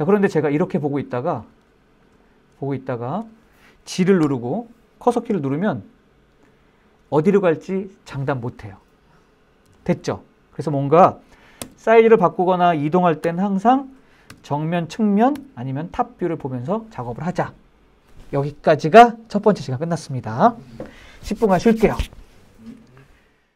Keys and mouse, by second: 0.0-1.1 middle drag, 1.3-1.6 shift+middle drag, 1.8 middle click, 2.5 shift+middle click, 3.9 g, 4.8-9.3 Up, 11.3 KP_Enter, 12.1 middle drag, 12.9 KP_1, 14.0 KP_3, 15.0 KP_7.